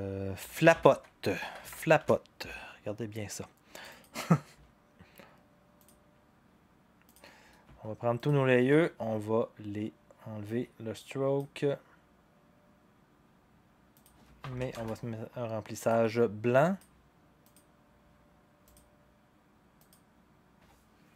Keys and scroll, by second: 0.1-2.2 typing, 14.6 0, 14.7 Return.